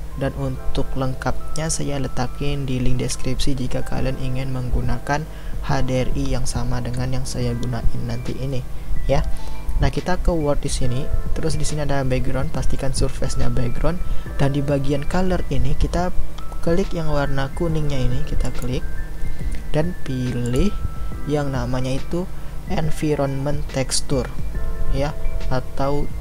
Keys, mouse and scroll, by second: 0.0-21.4 middle drag.